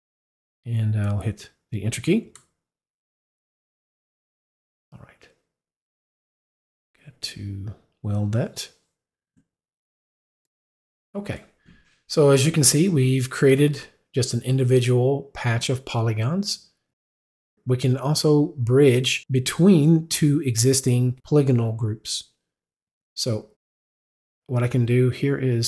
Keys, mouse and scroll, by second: 1.2 click, 1.9 click, 2.3 Return, 7.4 right click.